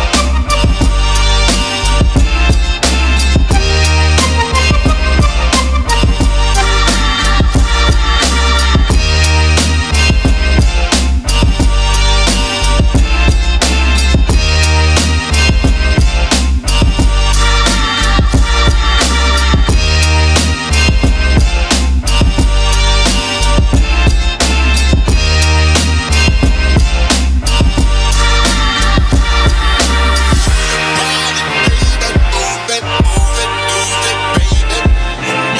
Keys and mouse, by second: 4.7 BackSpace, 23.1 shift+middle click, 23.6 shift+middle click, 25.7 ctrl+z, 27.0 click, 27.7 shift+click, 28.3 shift+click, 28.8 shift+click, 30.8 shift+click, 31.3 shift+click, 32.4 ctrl+l.